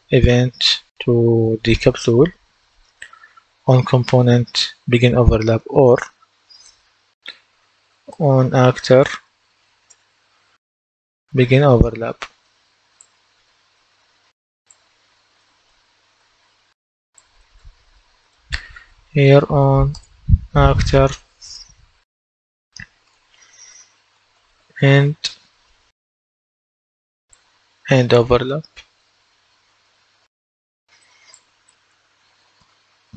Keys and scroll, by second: 7.4-10.9 typing, 19.0-20.6 typing, 21.8-25.3 typing.